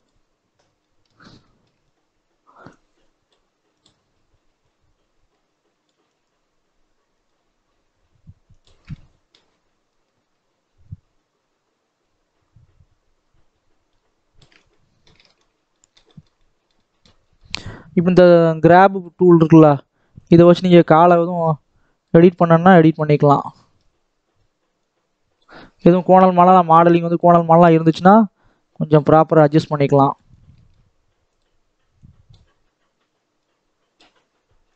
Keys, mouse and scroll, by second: 0.0 shift+click, 0.6 scroll down 1, 0.7 middle click, 1.1 scroll up 1, 1.3 shift+middle click, 1.7-2.7 scroll up 1, 2.7-8.9 drag, 8.9 middle click, 9.7-12.8 shift+drag, 14.5 scroll down 1, 14.5-17.1 middle drag, 17.1 scroll down 2, 17.3 middle click, 17.6-18.5 scroll up 1, 18.5-23.7 drag, 23.7-24.7 middle drag, 24.7 click, 25.5 shift+middle click, 26.3 click, 27.2 scroll down 2, 27.5 middle click, 27.9-28.4 scroll up 2, 28.4 click, 29.1-30.2 middle drag, 30.2 scroll up 1, 30.5 shift+middle click, 31.3-34.7 drag.